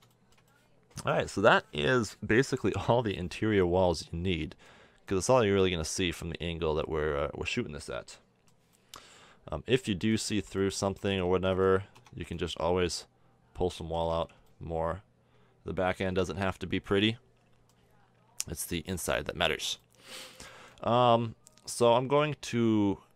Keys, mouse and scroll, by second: 1.0 middle click, 4.1 middle click, 4.8-6.9 middle drag, 8.7-9.9 middle drag, 10.3 Tab, 11.3 Tab, 11.9 Tab, 13.8 a, 13.9 Tab, 14.5-16.4 middle drag, 18.4-19.9 middle drag, 20.5 middle drag.